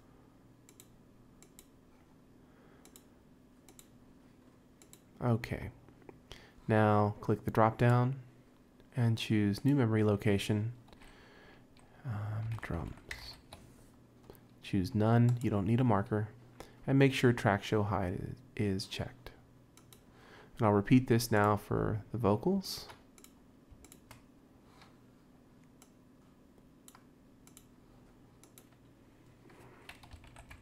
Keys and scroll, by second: 12.4-13.7 typing, 30.1-30.6 typing.